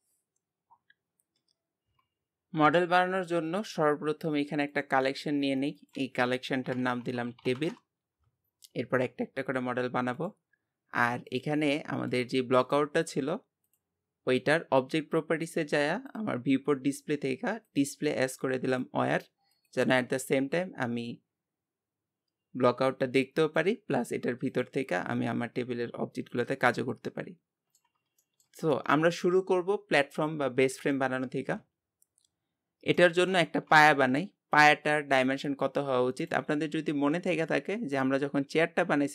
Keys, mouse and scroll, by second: 4.7-12.0 drag, 12.0 g, 13.6-15.1 drag, 15.1 scroll down 2, 16.1 click, 16.8 scroll down 8, 17.6-22.6 drag, 23.4-26.7 drag, 26.7-31.9 middle drag, 32.5-33.0 scroll up 1, 33.0 middle click, 33.4 shift+a, 35.4 s.